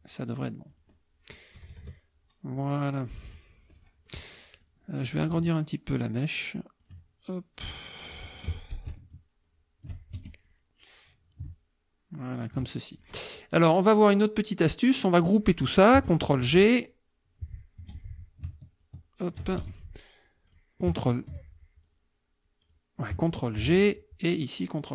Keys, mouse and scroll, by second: 0.7 click, 1.5 KP_Subtract, 2.7 middle click, 3.1 middle click, 3.6 click, 4.6 click, 5.5-7.0 ctrl+drag, 8.4 F2, 9.1 ctrl+shift+click, 10.2 ctrl+shift+F1, 10.5 ctrl+shift+click, 11.5-12.7 ctrl+shift+drag, 12.9 ctrl+shift+click, 14.0-15.4 drag, 16.3 ctrl+g, 17.8 F2, 17.9 click, 18.8 ctrl+shift+click, 19.6 ctrl+shift+F1, 19.8-20.7 ctrl+shift+drag, 21.9-22.9 drag, 23.6 ctrl+g, 24.3-24.9 drag.